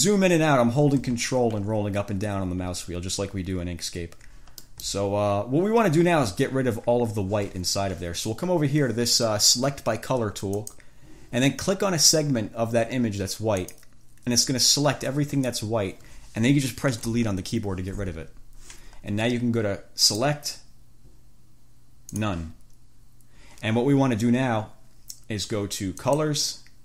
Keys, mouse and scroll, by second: 0.1-0.5 ctrl+scroll up 1, 0.7 ctrl+scroll down 2, 1.4-1.7 ctrl+scroll down 2, 1.8-2.1 ctrl+scroll up 2, 2.3-2.7 ctrl+scroll down 2, 2.9-3.2 ctrl+scroll up 1, 3.5 ctrl+scroll down 2, 3.9-4.4 ctrl+scroll up 4, 4.9 ctrl+click, 5.2 ctrl+scroll down 2, 5.6 ctrl+scroll up 2, 6.1 ctrl+scroll down 2, 10.7 click, 13.7 click, 17.3 Delete, 20.3 click, 22.3 click, 26.1 click.